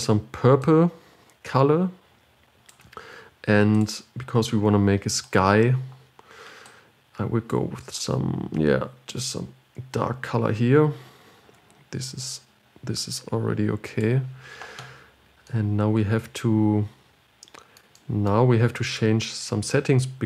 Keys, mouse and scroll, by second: 4.1-7.0 drag, 19.2-20.2 drag.